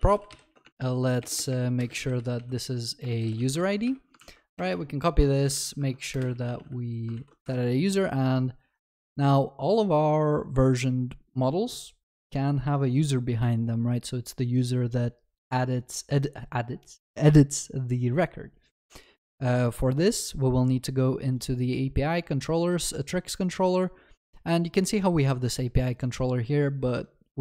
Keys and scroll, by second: 3.6 ctrl+s, 4.5 ctrl+d, 7.2 ctrl+s.